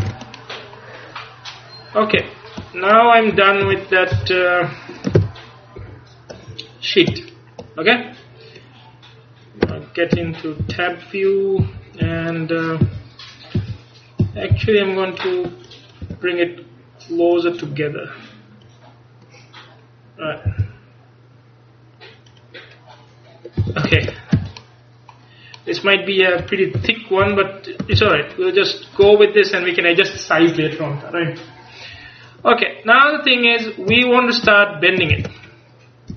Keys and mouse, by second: 0.1 a, 3.7 KP_1, 4.2 KP_3, 5.2 ctrl+KP_3, 5.8 ctrl+KP_1, 9.7 Tab, 10.2-14.6 typing, 17.4-19.6 drag, 20.5 g, 22.5-24.4 drag, 23.7 a, 24.0 ctrl+s, 24.4 z, 26.9 KP_1, 27.3 KP_3, 28.0 ctrl+s, 32.4-34.3 middle drag, 35.2 ctrl+s.